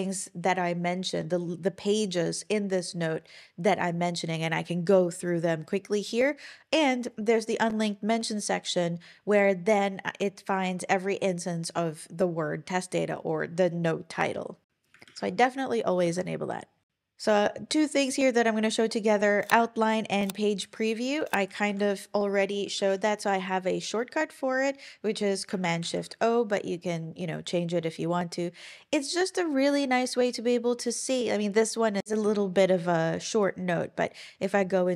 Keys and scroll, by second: 14.7 super+w, 15.1 super+,, 21.3 Escape, 21.7 shift+super+t, 25.8 shift+super+o.